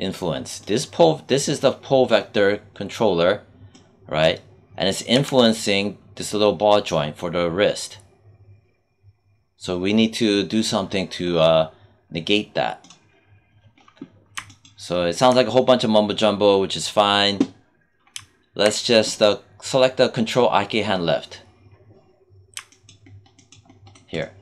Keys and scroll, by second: 5.0 z.